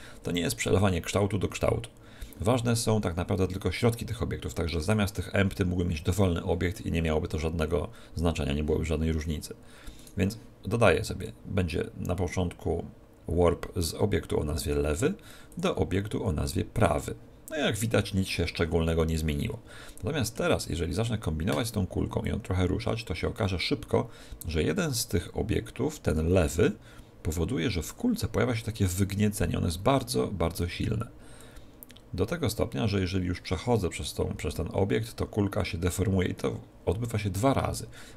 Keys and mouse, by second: 4.8-6.8 right drag, 10.0-11.8 right drag, 11.2-13.2 drag, 15.5-17.5 drag, 19.4-22.3 middle drag, 22.3 click, 28.2-29.9 middle drag, 31.4-33.3 drag.